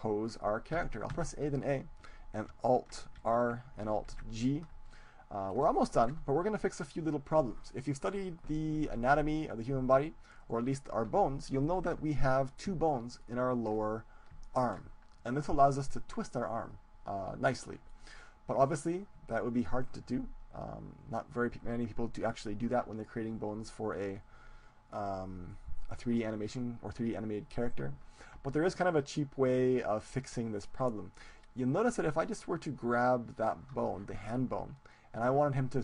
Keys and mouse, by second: 0.8 a, 1.2 a, 3.2 alt+r, 4.1 alt+g, 5.0-7.6 middle drag, 10.5-12.2 right drag, 11.6 click, 12.0-16.3 middle drag, 17.9-21.0 middle drag, 31.2-33.8 right drag.